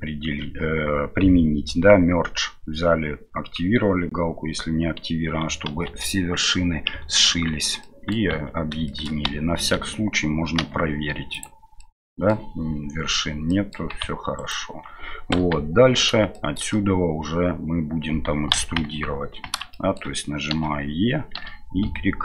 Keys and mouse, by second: 5.6 ctrl+a, 7.8-8.1 middle drag, 8.3 Tab, 8.8 shift+middle click, 9.2 a, 9.7 a, 10.6 m, 11.7 middle click, 13.5 middle click, 14.3 alt+right click, 15.3 KP_1, 16.3 middle click, 18.5 KP_1, 19.7 shift+middle click, 20.5 e.